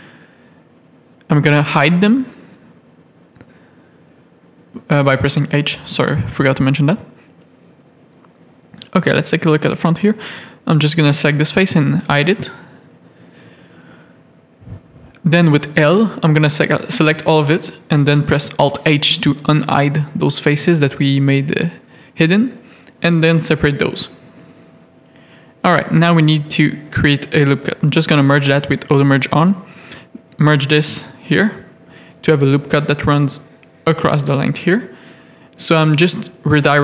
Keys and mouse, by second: 0.5 h, 0.9 shift+middle click, 1.5 z, 1.8 a, 3.7 shift+middle click, 5.2 shift+middle click, 7.1 middle click, 8.5 middle click, 8.9 z, 10.8 h, 11.6 middle click, 12.2 middle click, 12.7 shift+middle click, 13.5 middle click, 14.7 l, 15.9 alt+h, 16.6 middle click, 17.0 click, 18.1 Tab, 18.4 alt+a, 18.7 middle click, 20.2 shift+middle click, 21.6 KP_3, 21.8 Tab, 22.2 1, 22.9 shift+middle click, 25.5 g, 26.3 a, 26.7 shift+middle click, 27.7 g, 29.1 g, 31.1 g, 32.2 shift+click, 32.6 a, 33.4 g, 34.5 click, 34.9 g, 36.4 ctrl+r.